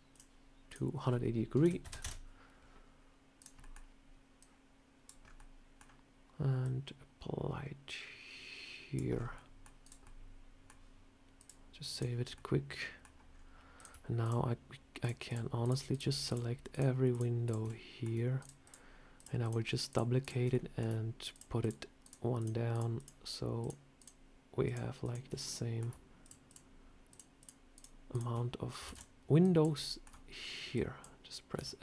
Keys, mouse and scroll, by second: 0.6 click, 3.3 click, 3.5 middle click, 4.3 click, 5.1 scroll up 3, 5.3 middle click, 6.5 scroll down 1, 6.5 click, 9.0 scroll down 4, 9.2 middle click, 9.7 click, 9.9 middle click, 11.3 click, 12.1 scroll up 1, 12.2 middle click, 13.2 scroll up 2, 13.7 click, 14.1-16.6 shift+click, 16.6 click, 17.0 shift+click, 17.3 shift+click, 17.6 middle click, 18.3 shift+click, 19.8 shift+click, 20.1 shift+click, 20.4 middle click, 21.2 shift+click, 21.3 shift+click, 21.9 shift+click, 22.3 shift+click, 22.6 shift+click, 22.7 shift+click, 23.6 shift+click, 23.9 shift+click, 24.7 shift+click, 24.9 shift+click, 25.3 middle click, 26.1 shift+click, 27.6 shift+click, 28.8 shift+d, 29.3 click, 29.7 shift+middle click, 30.6 click, 31.4 s.